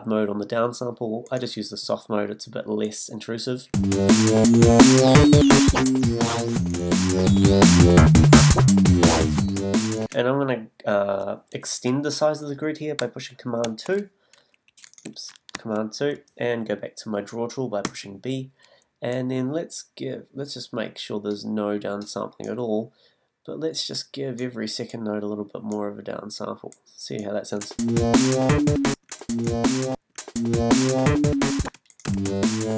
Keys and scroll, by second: 3.7 space, 10.0 space, 13.6 super+2, 15.5 super+2, 17.8 b, 27.6 space, 31.4 b.